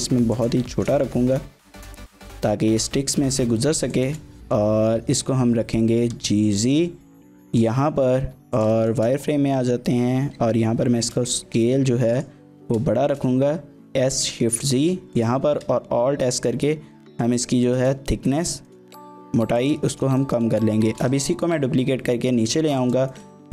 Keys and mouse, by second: 0.3 shift+click, 0.7 shift+middle click, 1.0 middle click, 2.1 g, 2.4 z, 3.9 shift+click, 5.1 KP_1, 6.0 g, 6.2 z, 7.5 click, 8.2 z, 8.9 shift+click, 9.0 middle click, 10.1 s, 12.2 middle click, 12.6 s, 12.9 shift+z, 15.1 click, 15.5 alt+s, 17.6 shift+click, 18.7 shift+click, 18.9 middle click, 19.3 z, 19.9 shift+middle click, 20.2 middle click, 20.9 shift+d, 21.1 z, 22.8 click, 23.1 shift+middle click, 23.3 middle click.